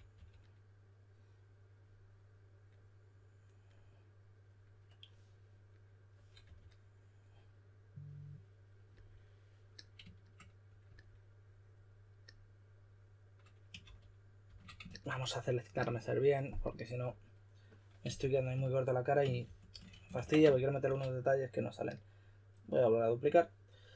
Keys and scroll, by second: 0.0-0.6 typing, 6.4 typing, 13.8-14.4 typing, 17.9-20.8 typing.